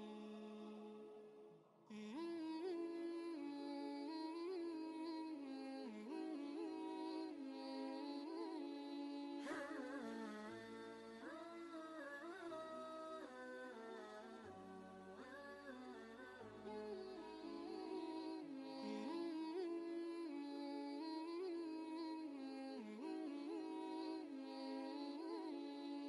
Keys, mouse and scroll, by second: 0.3 ctrl+space, 1.2 click, 2.4 ctrl+space, 2.8 ctrl+click, 3.0 ctrl+space, 4.3-10.1 drag, 10.1 ctrl+z, 11.1-17.8 shift+drag, 17.8 ctrl+space, 17.9 ctrl+click, 18.3 ctrl+space, 18.7 ctrl+space, 19.7 ctrl+r, 21.1-23.2 drag, 24.1 Right.